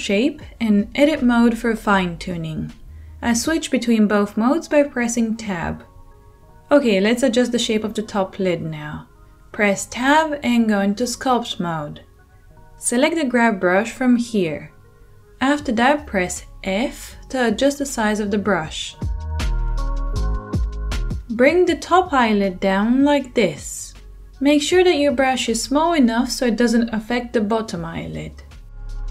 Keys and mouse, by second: 3.8 Tab, 9.8 Tab, 18.8 f, 21.2 f, 21.4-23.0 middle drag, 22.3 f, 23.0-29.1 drag.